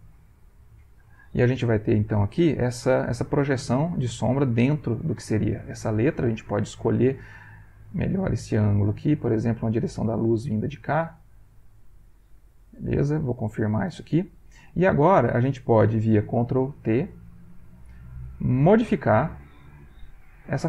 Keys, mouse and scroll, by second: 7.6-9.6 drag, 13.3 click, 16.6 ctrl+t, 18.8 click, 19.3 middle click, 19.6 click, 20.1 ctrl+t.